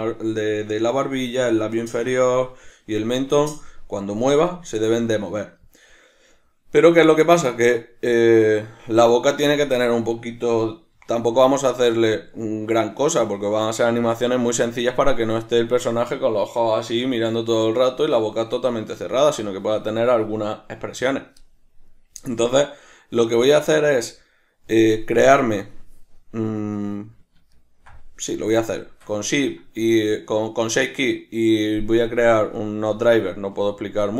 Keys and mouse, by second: 25.6 click, 27.6-34.1 ctrl+middle drag.